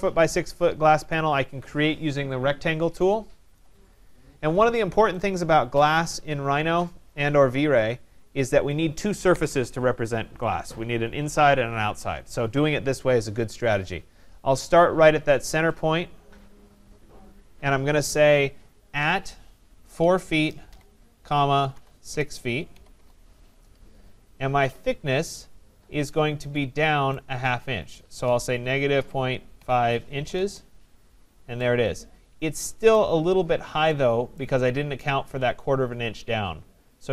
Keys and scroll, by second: 22.9 Return, 30.3 Return.